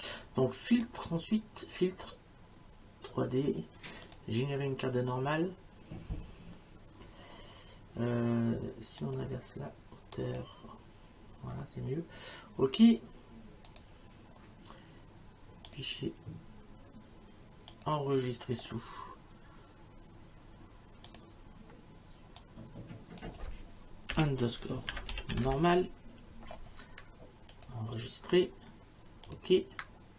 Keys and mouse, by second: 0.8 click, 4.1 click, 9.0 click, 10.2 click, 13.7 click, 15.7 click, 17.7 click, 21.1 click, 22.4 click, 24.1-26.0 typing, 27.6 click, 29.3 click.